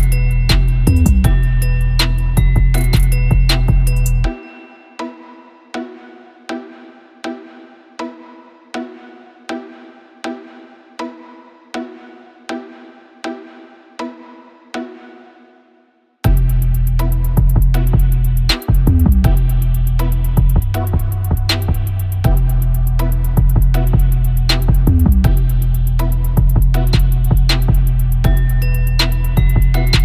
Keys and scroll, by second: 3.7 super+Tab, 4.9 super+v, 5.0 super+a, 5.8 super+a, 8.0 super+t, 9.0 super+a, 11.0 super+t, 11.1 super+;, 11.2 Left, 12.1 c, 12.6 super+;, 14.4 super+z, 21.6 super+u, 29.1 super+Tab, 29.9 super+Tab.